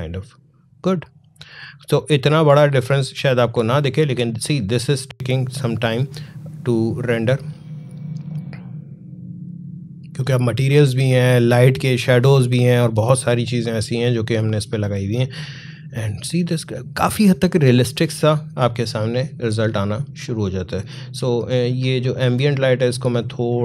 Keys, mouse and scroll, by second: 2.1 click, 13.7-21.0 drag, 21.0-23.6 drag.